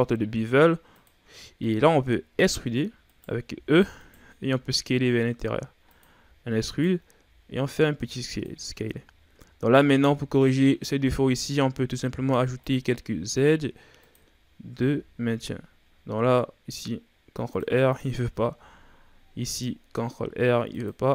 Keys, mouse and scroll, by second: 1.5-1.9 shift+scroll down 1, 1.9-2.3 scroll up 1, 2.3 r, 3.5 e, 4.5 s, 6.2 e, 7.1 s, 8.6 Tab, 9.2-9.6 shift+scroll down 2, 9.6-10.3 scroll up 1, 11.1 Tab, 12.1 ctrl+r, 14.8 ctrl+r, 18.6 ctrl+r.